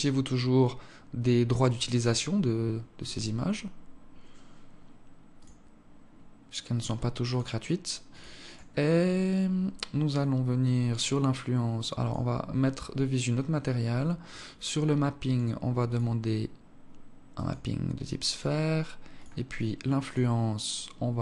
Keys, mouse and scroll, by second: 0.0-0.7 scroll down 2, 1.7-2.7 scroll down 9, 2.7 scroll down 1, 3.5-4.8 scroll down 2, 4.8 scroll down 1, 5.1 click, 6.5 click, 8.7-9.5 scroll up 8, 9.5 scroll down 4, 9.7-10.9 scroll down 9, 11.8 click, 14.0 click, 18.9 click, 19.2-19.8 scroll down 1, 19.8 click, 19.8-20.5 scroll down 2, 20.7 scroll down 2.